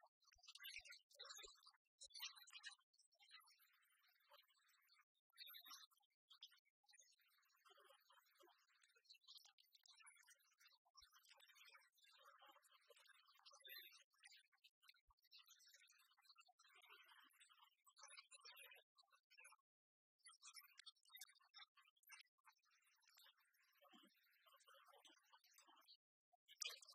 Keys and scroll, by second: 0.7 ctrl+t.